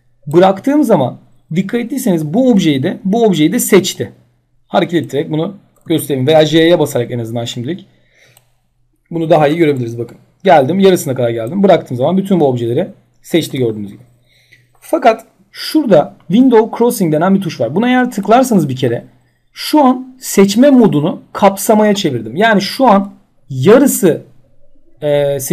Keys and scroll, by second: 5.4 ctrl+z, 6.3 j, 9.4 ctrl+z, 13.0 j.